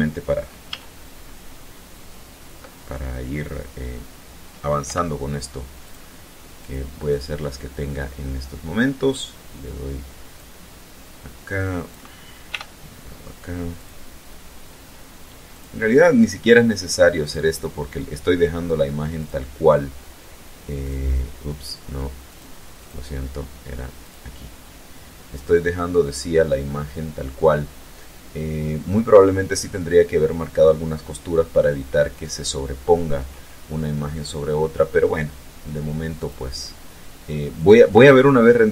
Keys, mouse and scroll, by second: 0.2 a, 4.4 u, 5.4 click, 6.1 click, 6.6 click, 9.9-11.7 drag, 12.0 t, 13.3 click, 15.1 click, 16.7 click, 18.7 click, 20.3 click, 21.8 click, 22.3 click, 23.5 click, 24.4-24.9 scroll down 1, 25.2 scroll up 1, 35.7 click, 37.1 click.